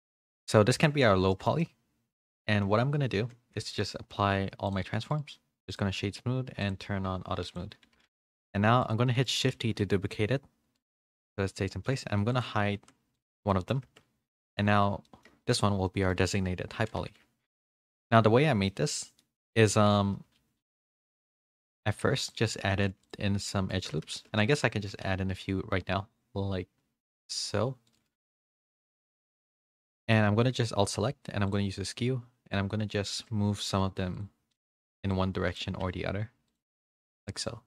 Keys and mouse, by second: 0.2 shift+middle click, 0.6 middle drag, 1.3 shift+middle click, 1.6-2.1 middle drag, 2.3-2.6 middle drag, 3.6 ctrl+a, 5.1 right click, 6.6 click, 7.5 click, 7.8 a, 8.1 a, 8.3 middle click, 8.8 click, 9.0 middle drag, 9.5 shift+d, 12.3 click, 12.8 h, 13.5 middle click, 13.8 Tab, 14.3 middle drag, 14.7 Tab, 15.0 middle click, 15.5 shift+middle click, 15.8 middle drag, 16.8 a, 17.0 a, 17.5 shift+middle drag, 18.7 shift+middle drag, 19.2 middle click, 19.7 Tab, 20.3 ctrl+r, 22.8 ctrl+r, 24.1 ctrl+z, 24.4 ctrl+z, 24.7 ctrl+r, 28.3 middle click, 29.0 2, 29.8 click, 29.9 middle click, 31.4 click, 32.5 click, 33.5 2, 34.2 click, 35.1 click, 36.5 alt+click, 37.3 click.